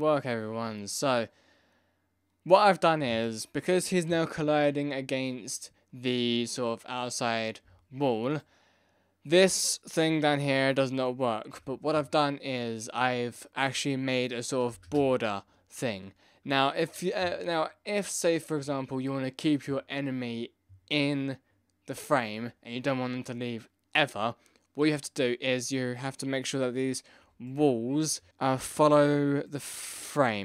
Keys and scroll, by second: 14.6 space, 14.9 space.